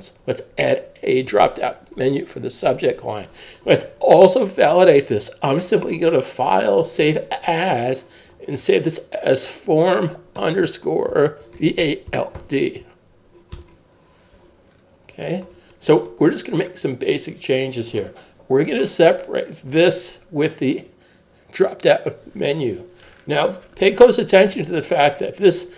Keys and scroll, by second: 11.1-12.9 typing, 13.5 Return.